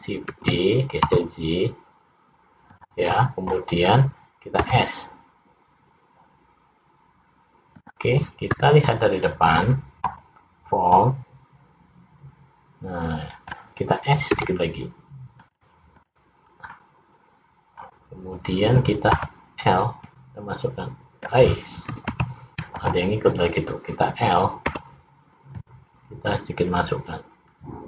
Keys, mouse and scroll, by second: 0.5 shift+d, 4.7 s, 11.0 click, 14.5 s, 16.1 click, 16.8 middle click, 19.4 l, 20.2 click, 22.2 ctrl+z, 22.9 click, 24.8 l, 25.6 click.